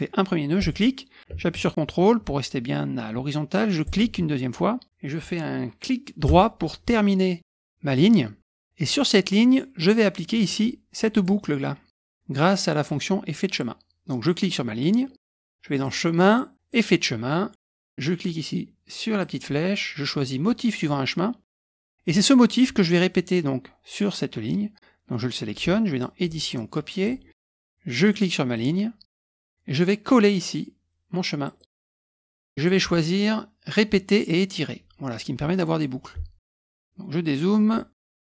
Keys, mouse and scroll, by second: 0.6 click, 3.8 ctrl+click, 6.3-7.4 right drag, 10.3 click, 11.2 click, 14.2 click, 15.8 click, 16.7 click, 19.2 click, 20.7 click, 22.1 click, 26.2 click, 27.0 click, 28.0-29.1 drag, 31.4 click, 32.6 click, 34.3 click, 36.4 click, 36.9-37.7 ctrl+scroll down 2, 37.7 ctrl+scroll down 1, 38.0 ctrl+middle click.